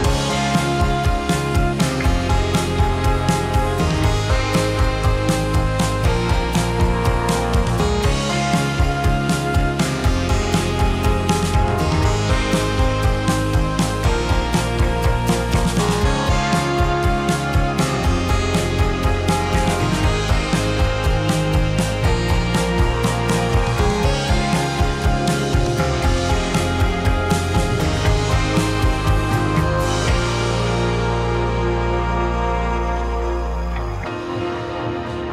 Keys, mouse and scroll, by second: 0.7 click, 1.0 click, 1.4 click, 1.6 F2, 4.2 shift+d, 6.8-8.1 drag, 7.6 KP_0, 8.7-10.7 drag, 9.7 BackSpace, 9.9 BackSpace, 10.4 KP_0, 11.5 space, 14.7 space, 16.2 click, 17.6 Tab, 18.3 a, 19.0 ctrl+t, 21.4 Tab, 22.6 click, 22.9 click, 23.2 click, 23.7 click, 25.9-26.5 drag, 27.9 space, 30.6 space, 31.2 click, 32.0 click, 32.2 click.